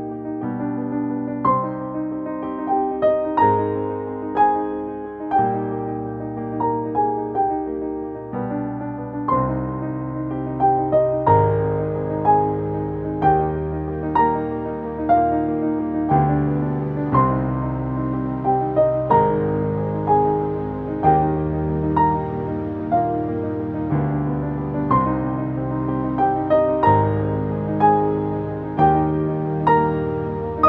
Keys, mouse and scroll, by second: 4.1 click, 7.9 space, 9.3 click, 9.4-11.0 ctrl+drag, 11.0 right click, 13.2 right click, 13.9 click, 14.3 ctrl+space, 14.4 ctrl+click, 14.6 ctrl+space, 15.9 click, 18.4 ctrl+space, 18.5 ctrl+click, 18.8 ctrl+space, 19.0 click, 19.7 v, 20.3 right click, 21.3-27.3 drag, 27.3 ctrl+space, 27.4-28.8 ctrl+drag.